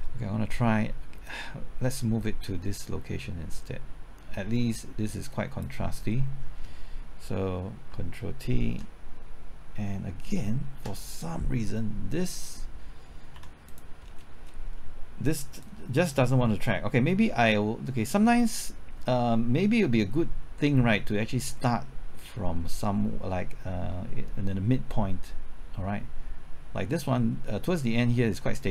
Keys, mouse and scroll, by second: 1.3-6.5 drag, 8.6 ctrl+t, 10.7 ctrl+z, 13.4 x, 13.7 click, 14.1-15.6 scroll down 1, 15.6-28.7 drag.